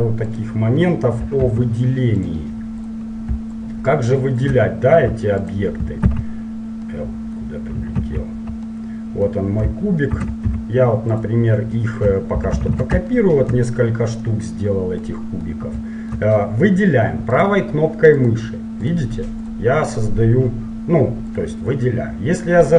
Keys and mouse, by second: 0.4-1.6 right drag, 1.6 Delete, 1.6 click, 3.0 right click, 4.7 click, 5.6-7.0 right drag, 6.2 ctrl+z, 7.0-10.3 middle drag, 10.3 shift+d, 12.4 shift+r, 12.6 shift+r, 17.5-22.7 right drag.